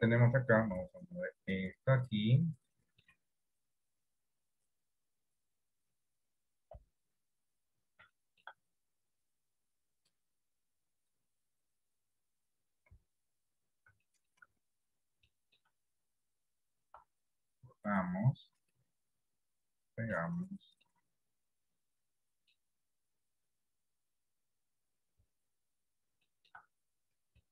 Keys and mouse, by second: 0.8 g, 2.5 middle click, 4.0 click, 5.6 click, 7.0 KP_1, 8.3 shift+middle click, 9.4 click, 11.2 click, 13.0 KP_7, 14.2 shift+middle click, 15.4 shift+middle click, 17.1 r, 19.3 click, 20.3 middle click, 21.8 middle click, 23.6 click, 25.3 KP_3, 26.3 shift+middle click.